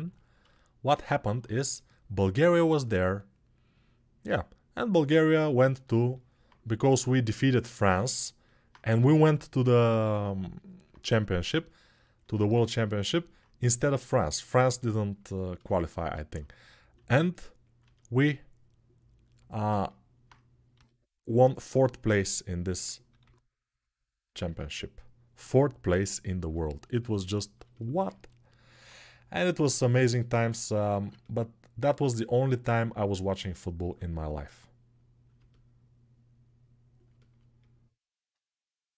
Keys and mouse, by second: 5.5 alt+shift+middle click, 5.7 alt+shift+middle click, 8.7 g, 9.6-11.7 alt+middle drag, 11.7-17.6 alt+drag, 16.7 s, 17.6-21.6 alt+middle drag, 20.5 g, 23.0 g, 27.0-35.1 alt+right drag, 35.1-38.9 alt+drag.